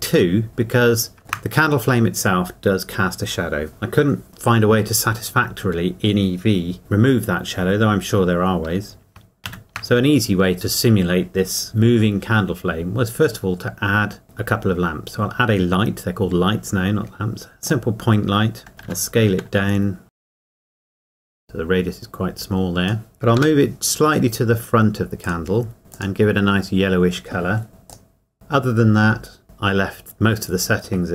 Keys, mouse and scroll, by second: 1.2 shift+middle click, 11.1 shift+a, 17.7 click, 18.8 s, 20.1 Escape, 20.3 middle click, 20.4 s, 20.6 Escape, 21.1 click, 21.3 click, 23.4 g, 25.2 click, 27.9 click.